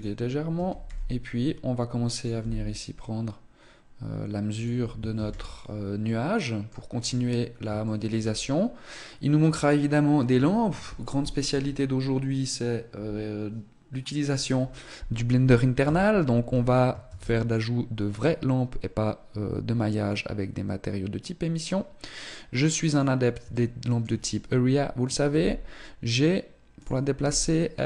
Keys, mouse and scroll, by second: 0.3 r, 2.0 click, 2.1 g, 4.9 ctrl+s, 5.8 middle click, 6.7-7.4 scroll down 5, 7.6 shift+middle click, 8.1 scroll up 3, 15.6 KP_3, 16.8 shift+a, 23.3 shift+middle click, 25.1 g, 27.0 r.